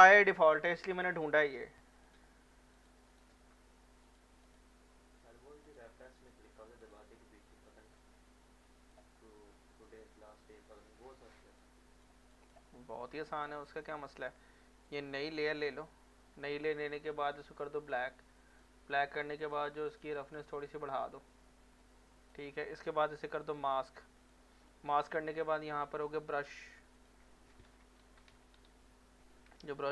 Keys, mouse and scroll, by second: 2.3 click, 3.1 right click, 3.2 right click, 4.0 click, 7.6 scroll up 1, 8.0 alt+click, 9.2 alt+middle click, 11.6 alt+click, 12.7 alt+middle click, 13.3 alt+click, 13.6 alt+middle click, 14.9-23.5 drag, 26.1-26.9 scroll down 1, 26.9 click, 27.6-29.1 typing, 29.5-29.9 scroll up 1.